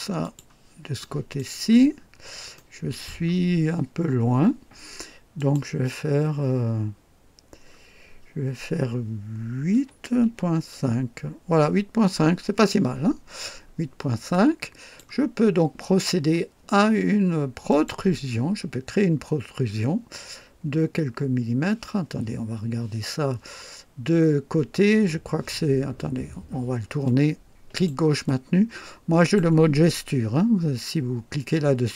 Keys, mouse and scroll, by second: 0.2 click, 1.0-1.5 right drag, 1.9-2.3 scroll up 1, 2.5-3.2 right drag, 5.3 click, 6.2 scroll down 1, 6.8 scroll down 1, 9.7 KP_8, 10.2 KP_Decimal, 10.5 KP_5, 13.4-13.8 scroll down 2, 14.3-15.2 drag, 17.7 click, 20.5-21.3 scroll down 2, 27.0 click, 28.2-29.5 drag.